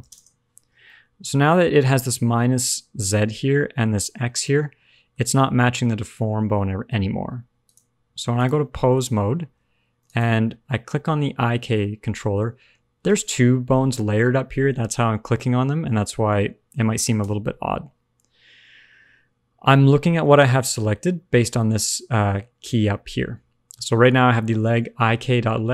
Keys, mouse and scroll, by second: 0.8 middle click, 4.4 middle click, 7.6 click, 8.7 middle click, 8.9-9.5 scroll up 1, 9.5-9.9 scroll up 1, 10.0 click, 11.8 scroll down 1, 12.1 middle click, 12.6 g, 19.7 shift+middle click.